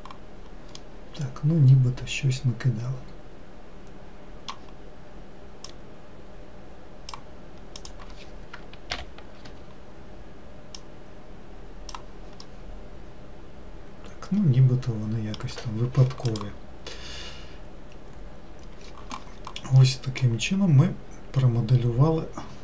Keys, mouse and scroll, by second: 1.2-4.3 middle drag, 6.2 click, 8.3 click, 9.4 ctrl+l, 11.2 click, 12.9-15.9 middle drag, 20.3 middle click, 20.8-22.6 scroll down 2.